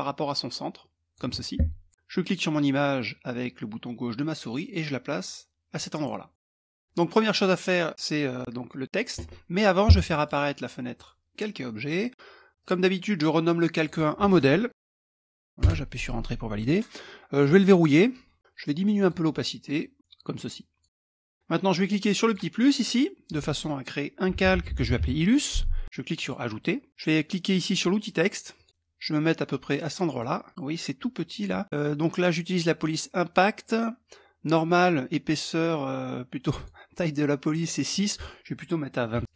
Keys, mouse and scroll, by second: 1.9-5.9 drag, 5.9 middle click, 6.8 click, 9.7-11.0 drag, 10.1 middle click, 12.1 click, 13.3 click, 14.4-15.5 typing, 17.1 click, 18.6 click, 19.6-20.7 drag, 21.8 click, 23.7-25.0 typing, 25.8 click, 26.2 middle click, 28.1 click, 29.7 click, 36.1 click, 37.1 click, 38.7 KP_2, 38.9 KP_4, 39.2 KP_Enter.